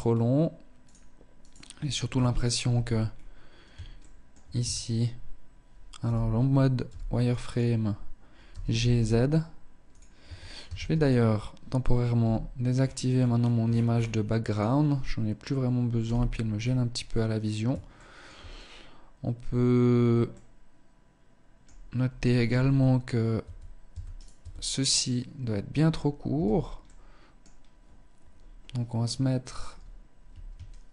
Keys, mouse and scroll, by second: 0.1 right click, 0.7 right click, 1.3 KP_1, 2.0 Tab, 2.3-2.7 scroll up 1, 3.1 shift+middle click, 3.8 a, 5.2 z, 6.1 b, 7.7 g, 9.1 click, 9.4 Tab, 9.9 ctrl+s, 11.4 n, 12.1-13.5 scroll down 15, 13.7 click, 15.2 n, 15.8-16.4 scroll up 5, 17.3 shift+middle click, 19.5 middle click, 21.7 z, 22.0-22.7 scroll up 1, 22.7 Tab, 23.1 Tab, 23.4 right click, 23.6 Tab, 24.4-25.5 scroll up 1, 25.5-26.0 scroll up 1, 25.5 a, 26.0 middle click, 30.1 alt+shift+right click, 30.4 alt+shift+right click.